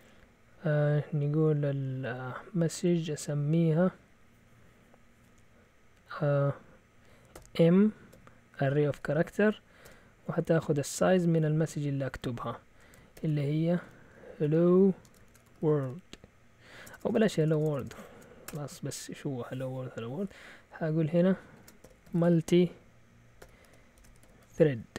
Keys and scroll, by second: 7.3-9.8 typing, 11.3 typing, 13.1-17.8 typing, 21.3-24.9 typing.